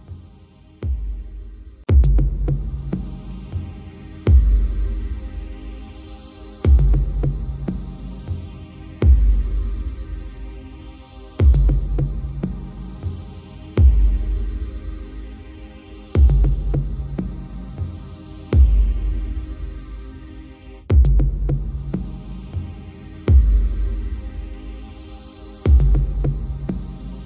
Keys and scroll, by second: 21.6 ctrl+j.